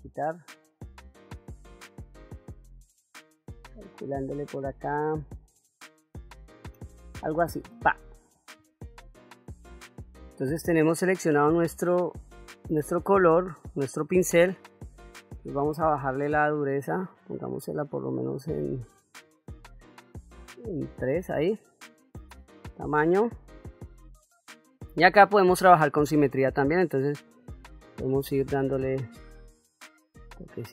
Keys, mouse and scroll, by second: 0.6 click, 7.3 click, 10.6-11.7 shift+middle drag, 12.1 ctrl+middle click, 13.2 shift+middle click, 14.2 middle click, 16.1 shift+f, 21.3 middle click, 22.2 f, 23.8 middle click, 27.0-28.4 drag, 28.9 click, 29.5 click, 30.0 click.